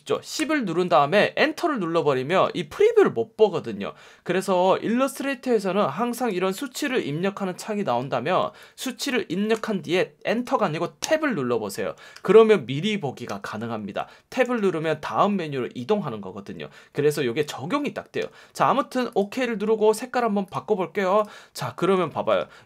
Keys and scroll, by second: 0.4 0, 2.4 F1, 4.4 F1, 6.9 F1, 7.9 F1, 9.3 1, 9.5 0, 11.0 Tab, 12.1 F1, 13.3 F1, 14.6 F1, 18.2 F1, 21.3 space, 22.4 F1.